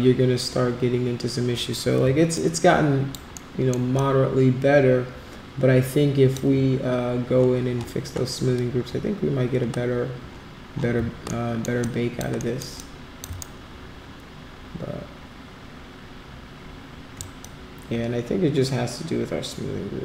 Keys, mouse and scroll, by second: 2.3 alt+click, 3.3 alt+middle click, 3.9-6.3 alt+drag, 11.2 alt+middle click, 11.8 alt+click, 12.3 alt+middle click, 12.7 alt+click, 13.4-17.2 shift+right drag, 17.4-20.0 alt+drag.